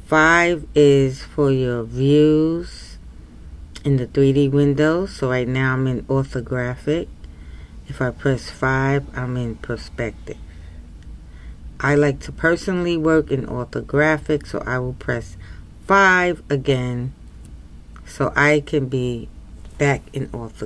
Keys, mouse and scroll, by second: 17.2 KP_5.